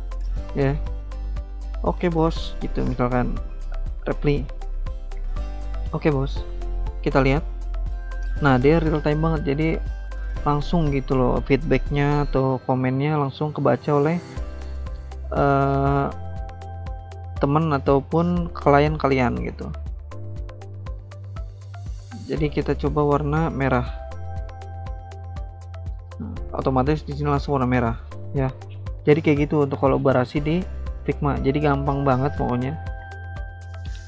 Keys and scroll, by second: 1.5-3.2 typing, 6.9 alt+Tab, 16.3 alt+Tab, 16.9 alt+Tab, 17.3 alt+Tab, 21.6 alt+Tab, 26.1 alt+Tab, 30.7 v, 32.4 alt+Tab, 33.0 alt+Tab.